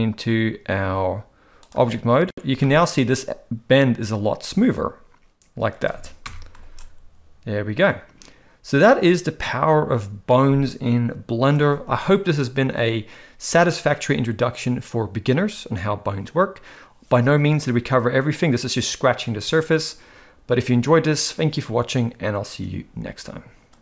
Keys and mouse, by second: 2.6 shift+middle drag.